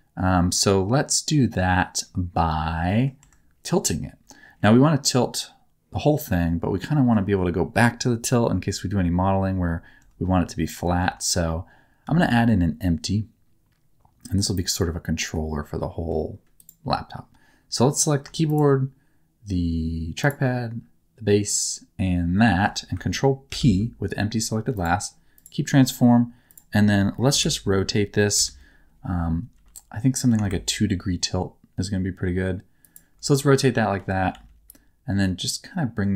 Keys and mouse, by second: 2.8 middle click, 3.2 Tab, 12.0 shift+a, 15.3 middle click, 18.4 shift+click, 21.4 shift+click, 23.4 ctrl+p, 25.3 click, 27.2 KP_1, 28.3 KP_3, 29.5 r, 33.9 g, 34.2 z.